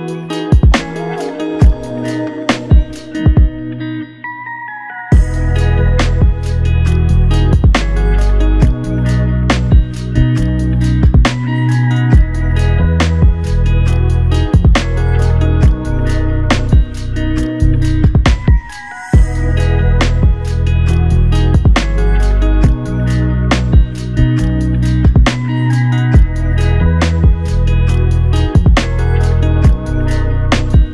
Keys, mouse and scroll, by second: 1.6 ctrl+alt+click, 4.7 double click, 5.9 r, 13.4 r, 20.2 shift+click, 24.7 ctrl+alt+click, 26.0 f.